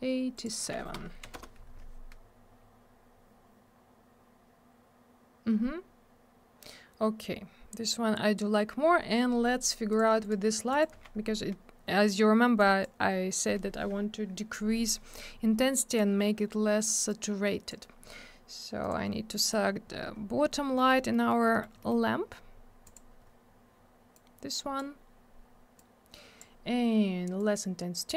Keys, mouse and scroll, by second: 0.3 click, 0.4 click, 0.9 BackSpace, 1.2 7, 1.3 Return, 2.6-3.9 scroll up 1, 4.9-7.5 scroll down 1, 8.7 scroll down 1, 9.9 click, 10.2 right click, 10.7 right click, 10.8 double right click, 12.6 click, 17.1 click, 18.8 click, 18.9 click, 19.4 middle click, 19.5 middle click, 19.6 scroll down 1, 20.8 middle click, 20.9 middle click, 21.1 middle click, 21.3 double middle click, 21.4 middle click, 21.6 middle click, 21.8 middle click, 21.9 double middle click, 22.1 scroll up 1, 22.8 click, 22.9 click, 24.1 click, 25.8 click, 27.4 click.